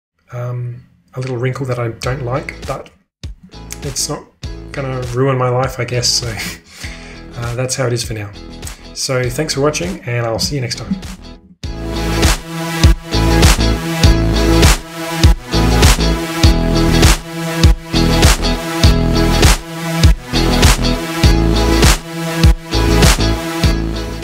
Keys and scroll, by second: 11.2 shift+super+2.